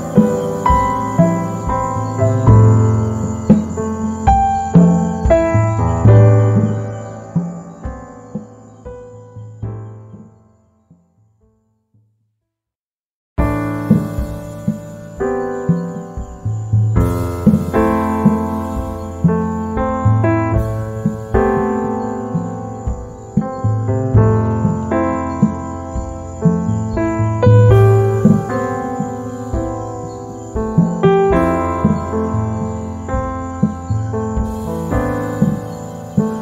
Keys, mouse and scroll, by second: 1.7 z, 1.8 click, 3.0 z, 3.1 click, 4.4 F10, 5.0 click, 14.5 z, 14.6 click, 15.5 F5, 19.5 click, 21.1 z, 21.2 right click, 23.1 F10, 23.4-25.5 drag, 25.5 z, 25.7 right click, 26.0 space, 26.5 click, 29.4 F7, 30.0 ctrl+click, 30.8 space, 31.0-33.8 drag, 33.8-36.4 drag.